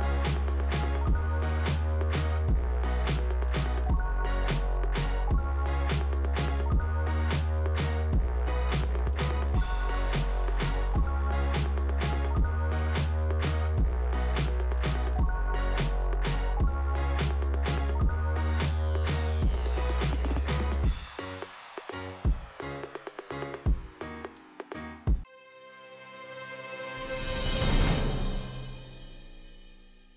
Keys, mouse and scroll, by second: 0.0 click, 5.7-6.0 scroll down 1, 7.2 middle click, 8.2 middle click, 11.4 click, 11.5 click, 12.6-13.5 scroll down 1, 13.8 click, 16.2 click, 18.2 scroll down 1, 20.0-21.0 scroll down 1, 21.0 scroll down 1, 21.5 click, 21.5 click, 21.9 click, 22.1 click, 22.7-23.2 scroll down 1.